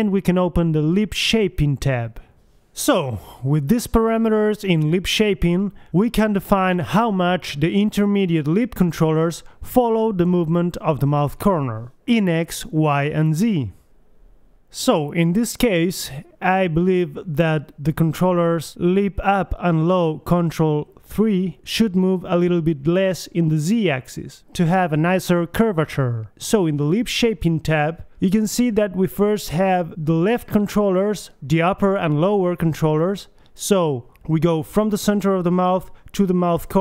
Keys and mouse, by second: 1.0-3.6 middle drag, 4.8 right click, 5.0 g, 8.7 g, 10.0 middle click, 10.7 KP_1, 11.9 middle click, 12.3 right click, 12.7 g, 12.8 click, 14.6 right click, 15.5 g, 16.5 right click, 17.7-19.5 drag, 18.8 g, 19.8-21.0 drag, 20.8 g, 24.6 a, 35.7-36.8 right drag.